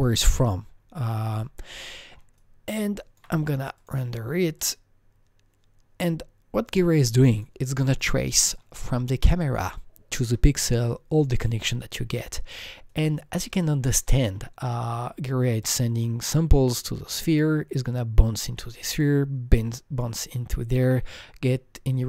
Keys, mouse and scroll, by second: 0.4-1.9 scroll down 17, 1.9 alt+middle click, 2.4-7.7 alt+drag, 2.7 alt+middle click, 2.7-3.2 alt+scroll down 1, 7.7 alt+double click, 8.4 alt+middle click, 8.8-10.8 alt+scroll up 2, 12.6-12.9 alt+scroll up 1, 12.9-17.1 alt+right drag, 13.2-13.9 scroll up 1, 14.1 alt+middle click.